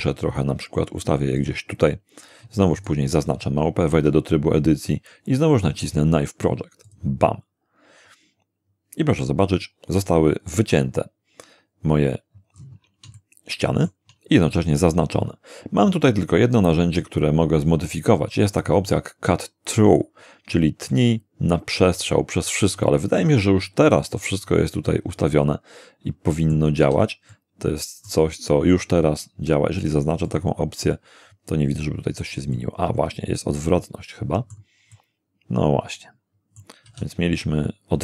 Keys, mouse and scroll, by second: 1.4 click, 2.8 shift+right click, 3.9 shift+Tab, 6.9 click, 12.6-12.9 scroll up 2, 13.2-14.1 shift+middle drag, 20.9-26.7 middle drag, 26.8 z, 27.3-28.3 middle drag, 30.3 click, 32.5-34.7 middle drag, 34.9-36.8 middle drag, 36.9 z.